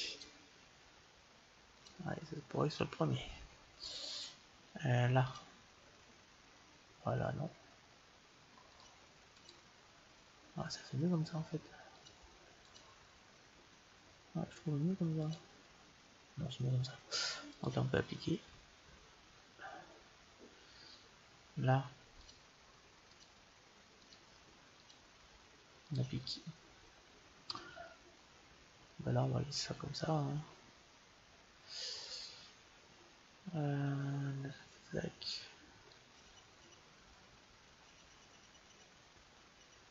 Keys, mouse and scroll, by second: 0.0-3.6 drag, 5.1-7.1 drag, 8.6-11.2 drag, 11.8-14.3 drag, 15.1-16.9 drag, 17.4-19.4 drag, 22.1-27.5 drag, 35.8-37.6 drag.